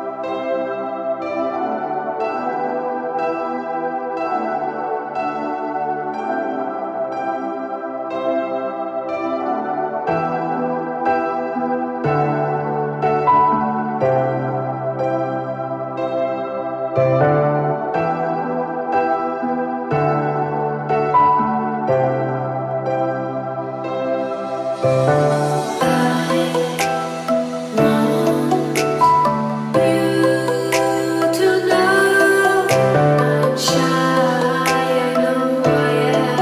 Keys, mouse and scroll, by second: 1.8 click, 2.7-4.8 drag, 7.3 click, 8.8 click, 10.2 scroll up 2, 10.8 click, 11.4 click, 11.9 click, 13.3 KP_5, 13.4 KP_0, 14.0 KP_Enter, 15.1 click, 15.6 scroll down 2, 16.2 click, 17.0 click, 18.3 click, 19.0 KP_1, 19.2 KP_5, 19.4 KP_0, 19.6 KP_Enter, 21.1 click, 22.4 click, 23.1-23.4 drag, 25.9-27.4 drag, 28.5 click, 29.0 click, 30.8 click, 32.0-33.3 drag, 34.1-35.0 drag, 35.2 click, 36.2 right click.